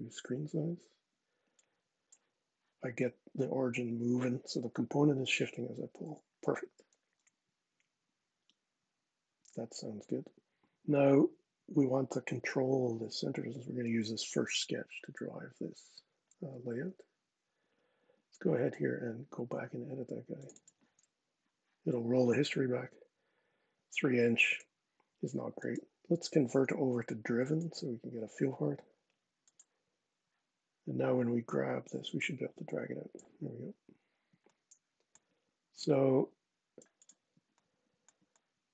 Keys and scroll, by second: 5.8 super+z.